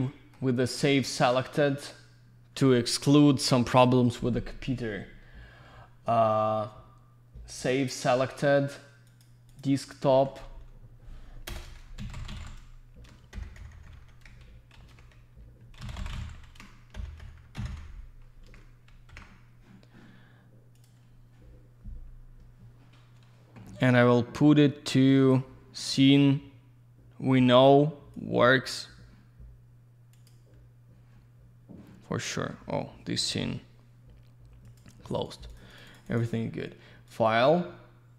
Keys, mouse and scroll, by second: 0.1 alt+middle click, 1.1 click, 9.1 click, 9.2 click, 9.5 click, 9.6 double click, 10.1 typing, 11.5-13.3 typing, 14.7 ctrl+z, 15.5-17.6 typing, 18.5 ctrl+a, 19.1 ctrl+c, 20.7 click, 25.5 click, 30.3 click, 35.0 click, 35.2 click, 35.3 click, 35.5 click, 35.6 double click, 35.7 click, 35.8 click, 35.9 click, 35.9 double click, 36.1 click, 36.2 click, 37.1 click.